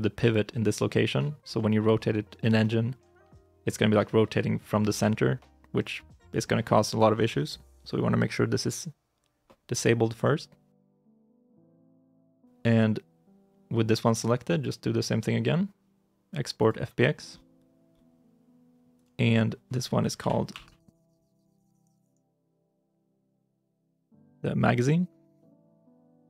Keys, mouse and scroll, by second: 10.8 shift+middle click, 20.1 Right, 20.4 BackSpace, 21.8-23.9 typing, 23.9 Return, 25.2 Return, 25.2 e.